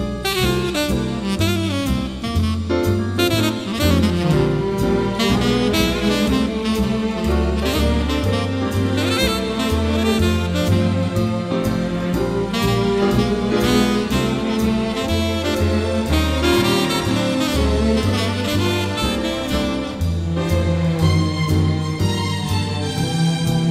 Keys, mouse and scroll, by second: 1.8-3.1 middle drag, 1.8 scroll, 1.8-3.1 scroll up 6, 3.7-5.4 middle drag, 3.7-6.1 scroll up 13, 5.4 middle click, 6.1-6.4 scroll down 7, 6.4-7.7 scroll up 8, 7.7 b, 8.6 alt+click, 9.6-10.2 scroll down 14, 10.2 middle click, 10.2-10.6 scroll, 11.6-13.2 drag, 13.3 click, 14.1 Escape, 14.3 Escape, 14.6 click, 14.9-15.6 scroll up 9, 15.6-16.4 scroll down 7, 16.4 b, 17.0 alt+click, 17.4-18.2 scroll down 3, 18.2-20.1 scroll up 12, 20.1 alt+click, 20.3-21.4 scroll down 14, 21.4-22.4 scroll up 11, 23.2-23.7 scroll down 4.